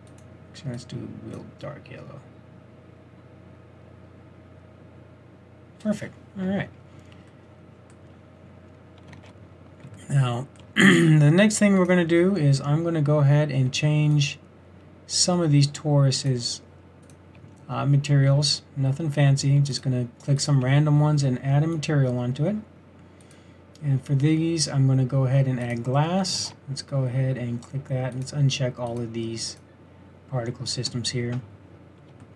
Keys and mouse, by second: 6.7-8.5 middle drag, 9.4 shift+z, 18.9 middle click, 25.0-26.8 middle drag, 26.8 shift+z.